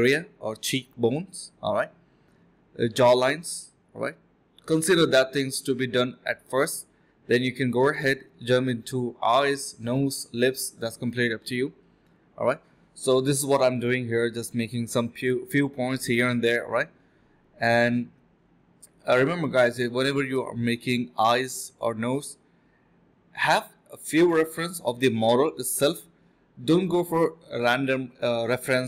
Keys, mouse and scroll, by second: 0.2 typing, 1.8 alt+click, 1.9 alt+click, 2.8 typing, 4.0 typing, 5.1 alt+click, 6.2 alt+click, 6.8 ctrl+b, 7.4 typing, 9.0 typing, 11.3 double click, 13.9 alt+click, 14.3 alt+click, 15.4 alt+click, 16.0 alt+click, 17.6-18.8 typing, 19.7 alt+click, 20.0 alt+click, 20.8 alt+click, 21.2 ctrl+b, 21.6-22.6 typing, 22.9 double click, 23.2 alt+click, 23.3 alt+double click, 23.4 alt+click, 23.9 double click, 25.6 alt+click, 25.9 alt+click, 26.3-27.5 typing, 27.2 double click, 27.7 double click.